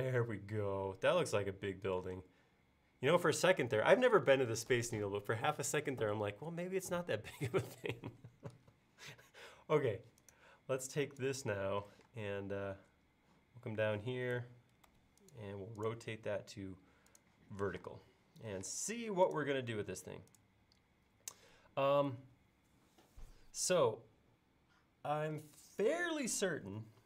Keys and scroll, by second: 2.2 space, 12.0 q, 14.4 Left, 17.8 m.